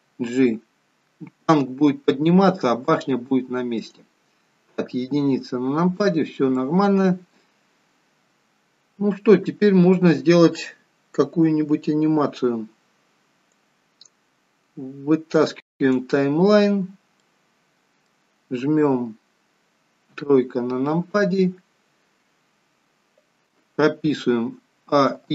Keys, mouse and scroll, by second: 0.1 g, 4.9 KP_1, 6.7 middle click, 13.6 click, 17.1 middle click, 20.1 KP_3, 24.7 a, 25.0 i.